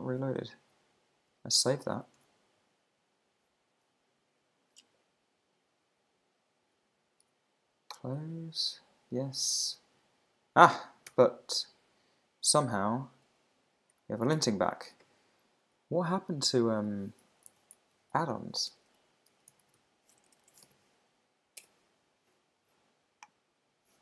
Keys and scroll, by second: 1.3 super+Tab, 2.2 super+Tab, 11.1 super+r, 14.3 alt+super+i, 17.5 super+f, 18.7 super+BackSpace, 21.3 Down, 21.6 Return.